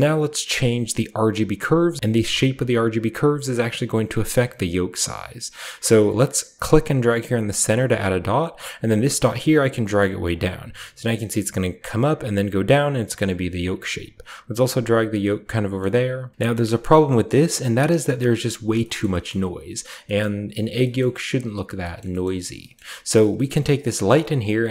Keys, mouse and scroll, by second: 2.1 click, 7.3 click, 9.1 click, 10.5 scroll up 1, 13.5-16.2 drag, 15.1-15.7 scroll up 1, 15.7 middle click, 15.7-16.1 scroll up 1, 16.1 scroll down 1, 16.5 shift+middle drag, 16.8 shift+middle click, 17.0 shift+middle drag, 17.4-18.7 shift+middle drag, 17.5-18.7 shift+scroll up 1, 18.7-19.2 scroll up 1, 18.9 shift+middle click, 19.2-20.0 shift+middle drag, 19.6-20.6 scroll down 1, 20.1 middle click, 20.7-21.6 shift+scroll down 1, 20.9-21.7 shift+middle drag, 21.9 middle click, 22.1 middle click, 22.5-23.3 scroll up 1, 22.7-23.3 middle drag, 23.4 middle click, 23.7 click, 24.1 scroll down 1.